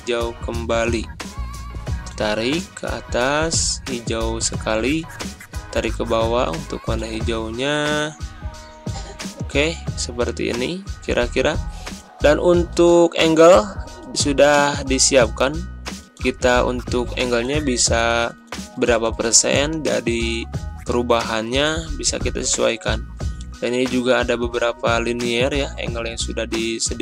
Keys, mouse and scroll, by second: 7.0-7.8 typing, 9.0-9.7 typing.